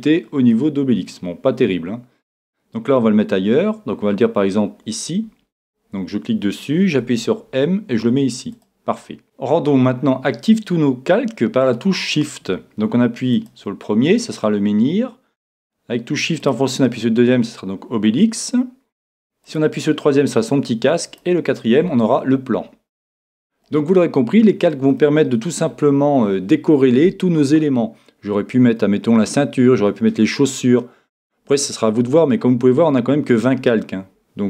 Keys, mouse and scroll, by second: 7.0 m, 13.3-15.3 drag, 16.8-18.1 drag, 18.2 click, 19.5-22.8 drag, 23.6-29.2 middle drag.